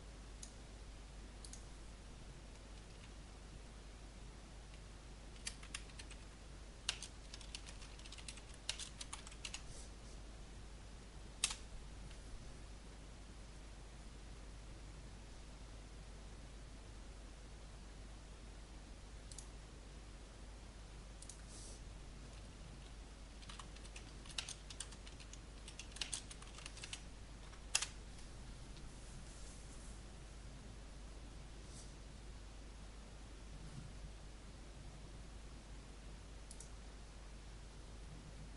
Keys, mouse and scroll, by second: 5.1-9.9 typing, 11.4 Return, 19.3 click, 23.0-27.1 typing, 27.7 Return, 36.4 click.